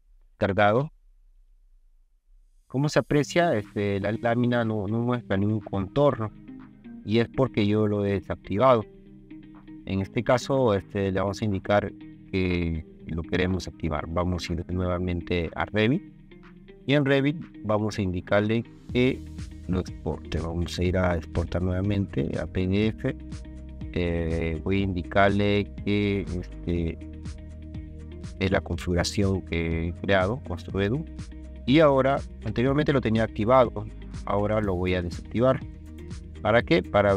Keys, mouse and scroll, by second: 2.9 scroll down 1, 7.1 scroll down 2, 7.6 scroll up 2, 8.4 scroll up 2, 9.5 scroll up 2, 10.3 click, 10.8 scroll up 1, 18.3 click, 21.3 click, 22.3 click, 26.5 click, 28.3 click.